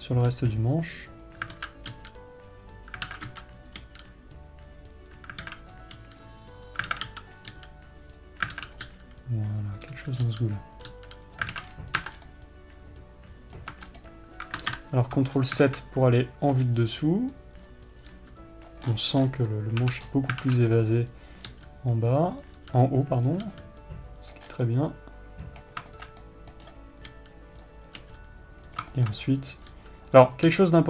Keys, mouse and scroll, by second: 0.8 g, 2.4 g, 6.2 click, 7.4 alt+a, 9.1 alt+a, 9.3 click, 10.6 click, 11.3 click, 12.1 alt+a, 12.5 Tab, 12.7 scroll down 1, 14.2 Tab, 14.2-17.0 middle drag, 14.4 scroll up 1, 15.9 scroll up 1, 17.0 click, 18.5 click, 19.4-19.8 scroll down 2, 20.6 scroll up 1, 21.2 scroll up 1, 21.9 click, 22.9 click, 23.8 click, 25.1 scroll down 2, 25.2-28.2 middle drag, 26.7-28.2 scroll up 4, 28.4 click, 29.5-30.1 shift+middle drag, 30.1 click.